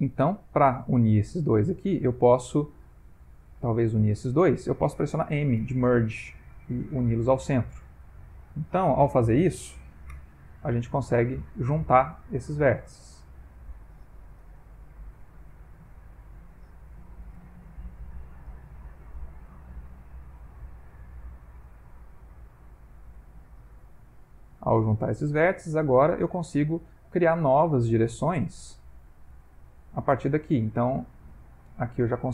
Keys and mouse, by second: 1.0 click, 3.3 click, 4.0 shift+click, 4.2 shift+click, 5.6 m, 7.9 click, 8.2 shift+click, 10.2 m, 12.4 shift+middle click, 13.3 click, 13.5 shift+click, 14.4 m, 15.7 click, 16.1 shift+click, 17.4 m, 19.1 click, 19.3 g, 21.6 click, 21.8 g, 23.8 click, 24.1 g, 24.8 shift+middle click, 32.2 click.